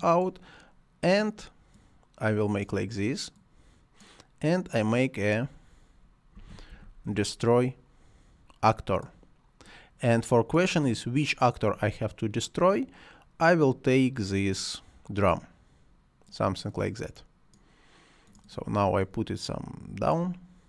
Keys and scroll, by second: 6.1-7.5 typing.